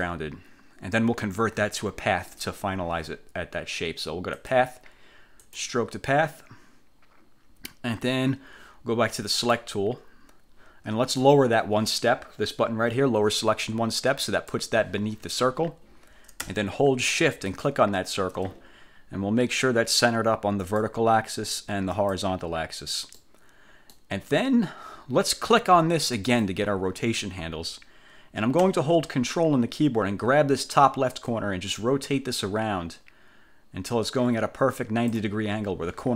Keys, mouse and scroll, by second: 4.5 click, 5.5 click, 9.5 click, 14.4 click, 17.6 shift+click, 20.7 click, 22.1 click, 23.3-24.3 middle drag, 24.3-26.4 scroll up 1, 26.4 click, 31.4-35.4 ctrl+drag.